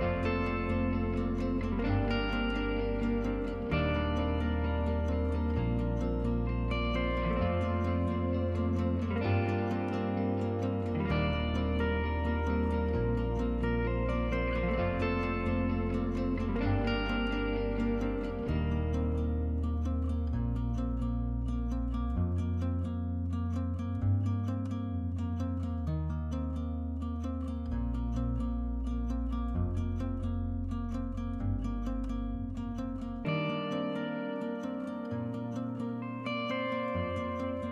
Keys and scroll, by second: 6.4-9.2 typing, 10.5-12.4 typing, 28.6 z, 37.1-37.5 typing.